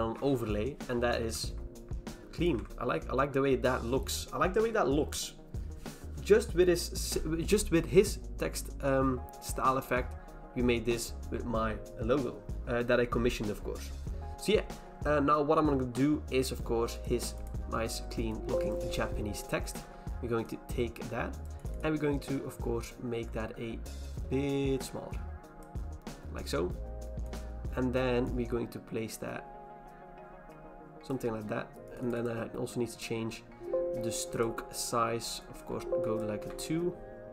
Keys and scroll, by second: 1.2 v, 2.5 ctrl+h, 19.8 v, 35.7 2, 36.4 2.